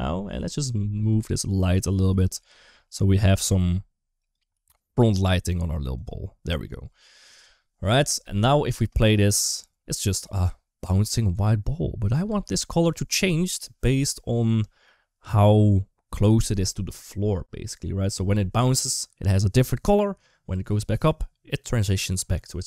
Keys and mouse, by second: 0.4 click, 1.4 g, 1.9 g, 4.3 g, 8.6 space, 12.1 space.